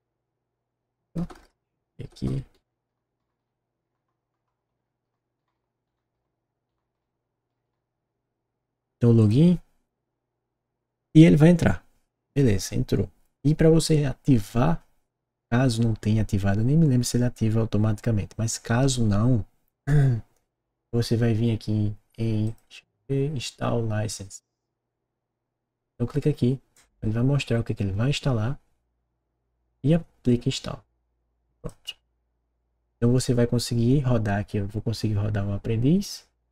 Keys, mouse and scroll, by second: 1.1 BackSpace, 2.5-7.4 typing.